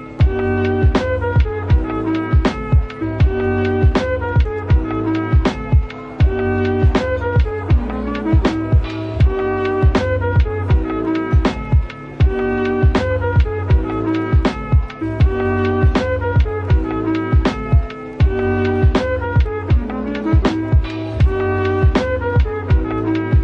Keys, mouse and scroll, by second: 1.2-2.3 scroll down 1, 2.3 typing, 3.0-3.5 scroll down 1, 3.5-5.2 typing, 3.7 scroll down 1, 6.4 right click, 8.7 ctrl+z, 9.1 ctrl+z, 9.5 ctrl+z.